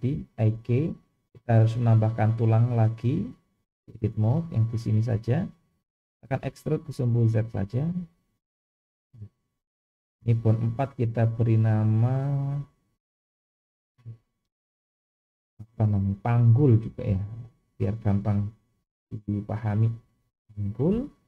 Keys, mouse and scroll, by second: 0.8-1.6 scroll down 1, 1.6-2.7 scroll up 2, 3.0-3.7 drag, 4.3 click, 6.4 e, 10.1 click, 11.3 click, 12.1-20.8 drag, 16.8 g.